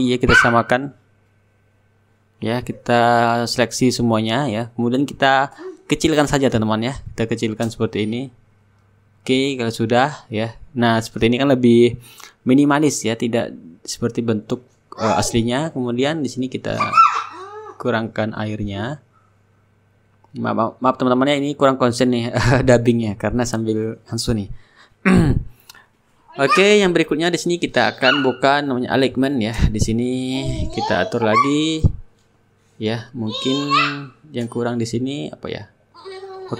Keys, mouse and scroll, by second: 1.1-4.8 drag, 7.5-11.7 drag, 13.3-20.3 drag, 20.4-22.8 shift+drag, 22.8 ctrl+g, 23.8 shift+click, 27.1-36.5 drag, 29.3-31.3 shift+middle drag, 30.0-31.3 shift+right drag, 33.9-36.5 right drag.